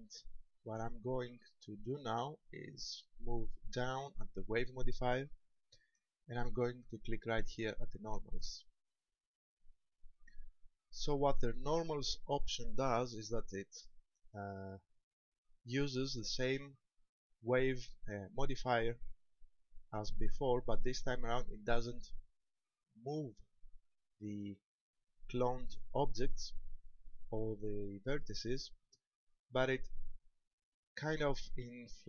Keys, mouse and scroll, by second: 2.2 click, 8.2 click, 13.6 shift+middle click, 14.5 middle click, 20.8 middle click, 26.8 middle click, 29.0 shift+middle click.